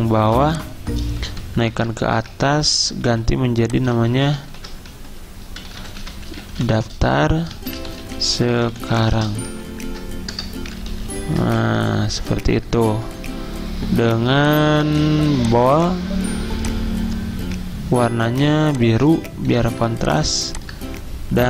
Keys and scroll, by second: 0.3 z, 1.7 ctrl+shift+], 2.3 Caps_Lock, 3.9 typing, 4.6 ctrl+a, 4.9-10.3 typing, 10.9 ctrl+a, 11.6 alt+Left, 11.8 alt+Left, 12.0 alt+Left, 12.1 alt+Left, 12.5 alt+Left, 12.7 alt+Left, 18.3 i, 19.5 v.